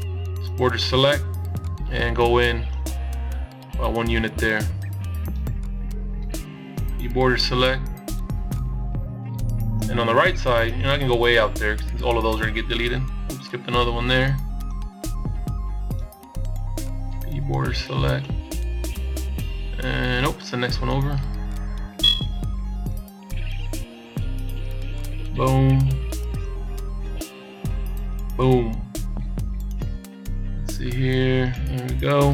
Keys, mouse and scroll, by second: 0.4 b, 4.7 b, 7.8 b, 12.7 b, 15.4 b, 19.5 b, 23.8 b, 27.3 b, 30.7 n, 31.9 n.